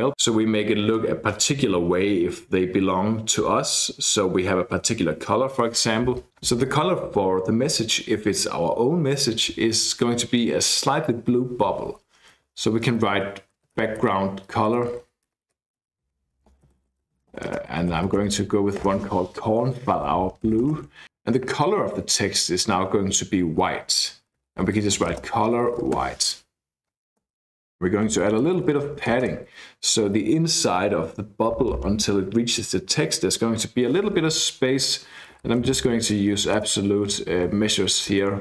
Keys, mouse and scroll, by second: 13.3-18.7 typing, 18.8 Return, 20.5 shift+;, 20.6 shift+space, 24.1-29.5 typing, 34.6-38.4 typing.